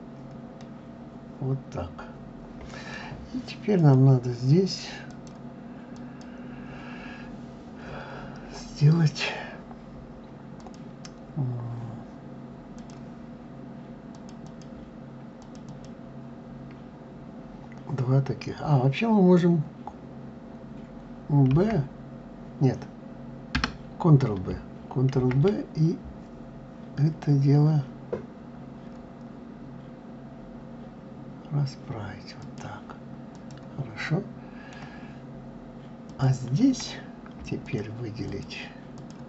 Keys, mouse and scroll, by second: 0.4-3.4 middle drag, 3.6 click, 4.9-7.9 drag, 8.1-9.7 scroll up 1, 10.4 click, 12.6 click, 13.9 click, 14.2 click, 15.1 click, 15.5 click, 21.3 b, 25.0 ctrl+b, 33.1 click, 33.8-35.8 middle drag, 35.8 click, 37.4 shift+click, 38.1 shift+click, 38.7 shift+click.